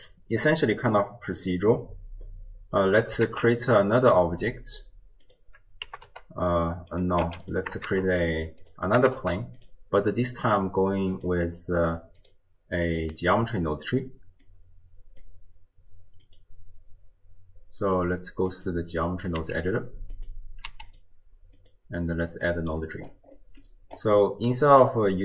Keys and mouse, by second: 3.3 shift+a, 5.9 g, 7.2 x, 7.9 shift+a, 9.0 g, 10.5 click, 11.1 click, 12.3-13.4 drag, 14.5 click, 16.3-18.7 drag, 19.4 q, 20.2 click, 20.7 q, 21.6 click, 22.4 click, 23.7 click.